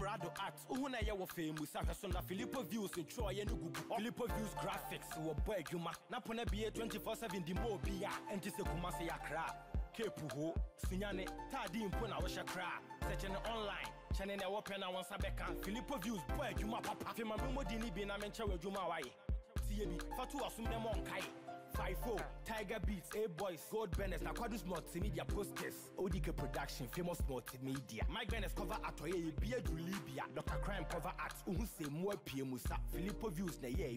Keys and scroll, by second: 12.7 ctrl+-, 19.1 ctrl+l.